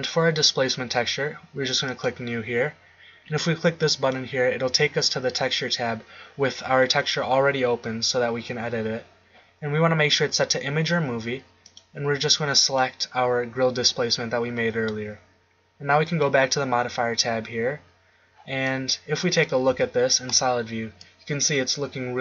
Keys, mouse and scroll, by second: 1.9-13.9 drag, 16.1-17.7 drag, 18.9 middle click, 19.7 z.